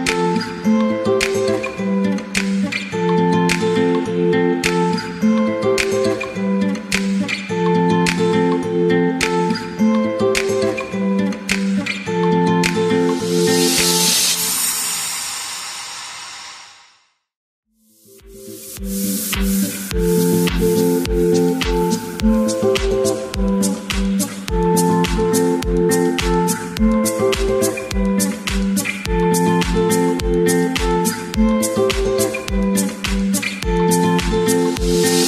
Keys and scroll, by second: 1.5-3.3 typing.